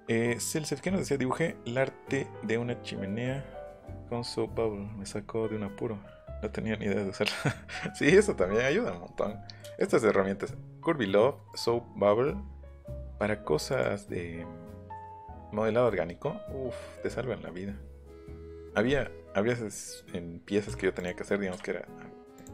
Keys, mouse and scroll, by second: 8.5 middle click, 8.9 middle click, 9.6 click, 11.5 right click, 13.7 click, 15.1 middle click, 15.4 scroll down 1, 15.9 middle click, 21.0-22.1 drag, 22.3 click.